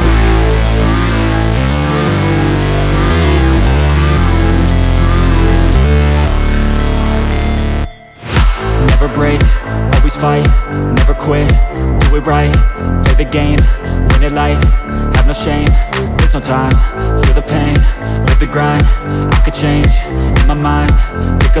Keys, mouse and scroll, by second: 0.6 ctrl+j, 1.3 ctrl+shift+l, 5.0 ctrl+shift+f, 8.3 click, 9.3 space, 9.5 click, 10.4 ctrl+e, 11.6 ctrl+j, 12.2 alt+i, 13.0-13.9 typing, 17.2 click, 20.6 ctrl+z, 21.5 alt+i, 21.5 alt+a.